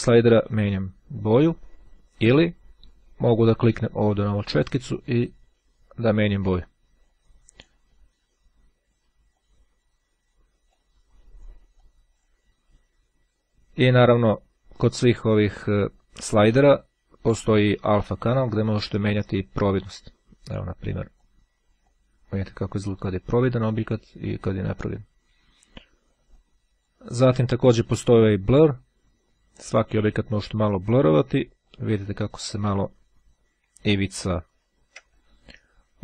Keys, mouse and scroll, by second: 2.1 click, 4.9 click, 6.4-7.8 drag, 9.2 click, 10.7-11.9 drag, 17.1-21.8 drag, 22.2 click, 23.6-24.8 drag, 26.4-27.4 drag, 28.6-31.4 drag, 31.7-33.3 drag, 33.8-34.5 ctrl+scroll up 2, 34.5-35.1 ctrl+scroll up 1.